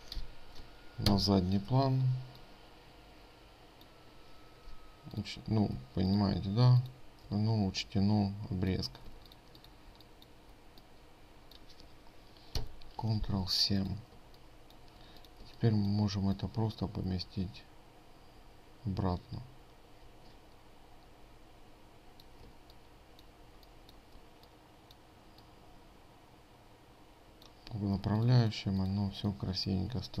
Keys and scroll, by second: 6.4 ctrl+space, 9.6 ctrl+space, 13.1 ctrl+7, 23.1 ctrl+space, 28.6 ctrl+space.